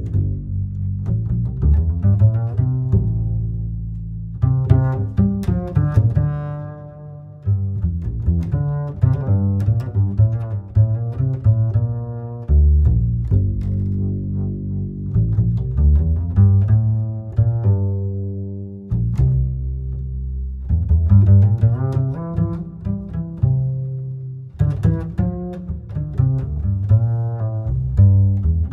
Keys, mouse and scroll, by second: 8.6 ctrl+KP_8, 8.8 ctrl+KP_8, 10.1-10.4 scroll down 1, 17.6 click, 18.4-19.1 scroll down 5, 19.1-21.7 ctrl+right drag, 21.7-24.8 ctrl+middle drag, 24.8-26.2 scroll down 3, 26.2 drag.